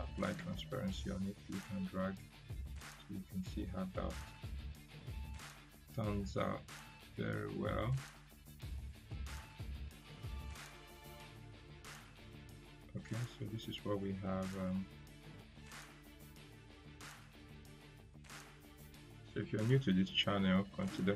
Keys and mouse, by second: 11.0 right click, 12.5-13.1 drag, 19.2 Delete, 20.8-21.1 drag.